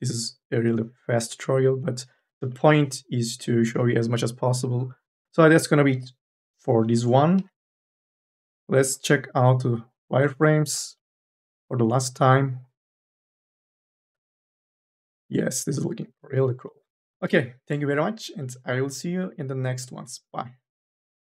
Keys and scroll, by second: 7.2 n, 7.6 b, 17.1 n, 17.5 a.